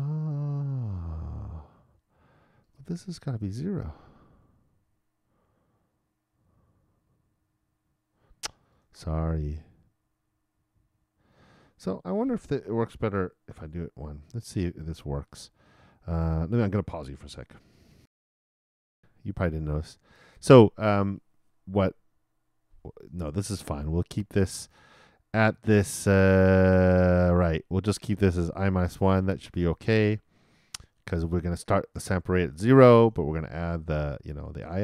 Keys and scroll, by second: 18.8 alt+i.